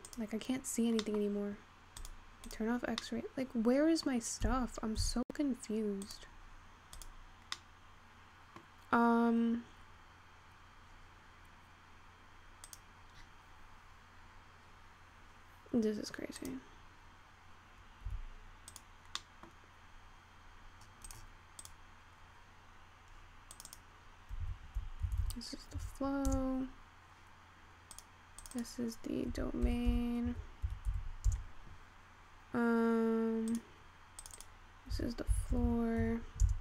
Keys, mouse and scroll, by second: 0.6 click, 1.2 middle click, 2.1-3.0 drag, 3.2-4.9 middle drag, 4.9 Tab, 5.8 Tab, 7.1 click, 8.0-9.8 middle drag, 9.8-11.9 scroll down 1, 12.9 click, 13.3-14.0 scroll up 9, 14.0-17.1 scroll up 6, 17.1 click, 18.8 click, 19.3 middle click, 19.7-21.1 scroll up 1, 21.1 right click, 24.2-26.8 drag, 28.0 click, 28.4 click, 28.6-31.6 drag, 33.6 click, 34.3 click, 34.4-35.7 drag, 35.7 o.